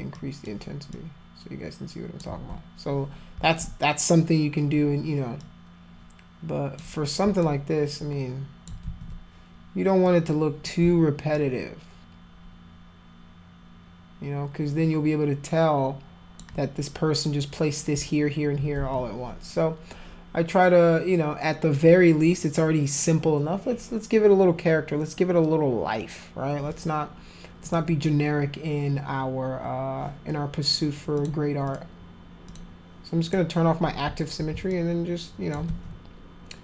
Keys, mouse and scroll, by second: 0.1 click, 0.9-2.2 drag, 3.4 ctrl+z, 5.4-6.8 drag, 7.0 scroll up 2, 7.4-8.7 alt+drag, 8.8 ctrl+z, 10.1 click, 11.3-16.4 alt+drag, 18.8 ctrl+z, 27.6 click, 31.2 click, 31.7 click, 32.5 click, 33.3 click, 34.7 alt+click, 35.7 ctrl+z.